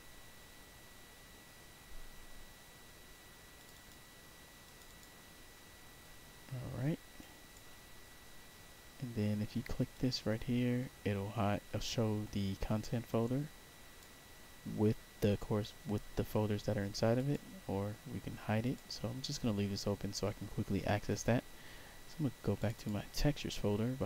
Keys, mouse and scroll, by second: 3.5 click, 3.6 click, 4.6 click, 4.8 click, 6.1 scroll up 1, 7.1 click, 9.8 click, 12.7-13.9 drag, 17.1 click, 18.5 click, 22.5 click, 22.7 click.